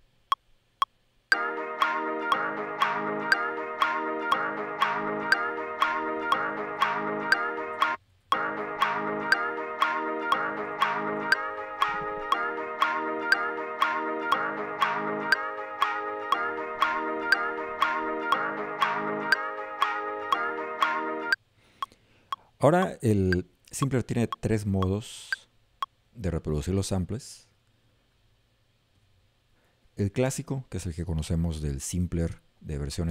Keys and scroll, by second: 10.2 Up.